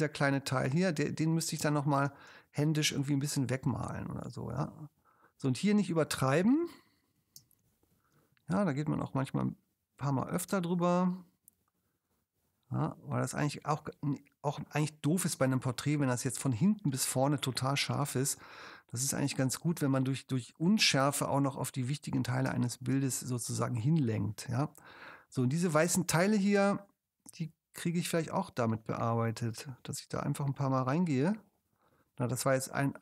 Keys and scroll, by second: 1.6 space, 2.3 ctrl+alt+space, 7.4 space, 10.5 space, 15.4 space, 22.5 space.